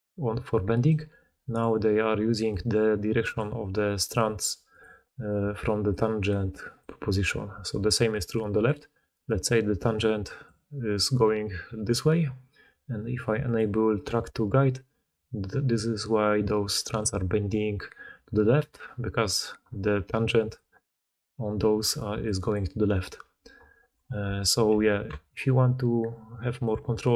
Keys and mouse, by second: 0.0-0.8 typing, 0.8-5.8 drag, 0.8-4.8 middle drag, 0.8-4.8 right drag, 2.2-3.5 d, 4.1 d, 5.3-10.8 typing, 11.4-17.8 drag, 14.9-18.7 d, 19.1 d, 19.4 d, 19.6 d, 20.5-22.2 drag, 22.0-22.8 d, 22.5-25.3 drag, 23.8 d, 24.2 Tab, 24.6 b.